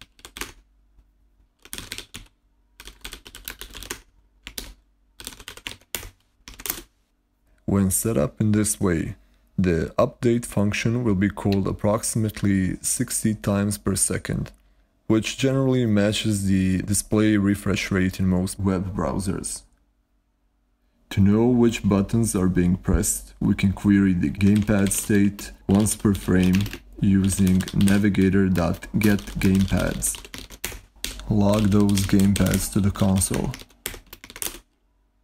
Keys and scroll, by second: 0.0-6.9 typing, 24.2-34.6 typing.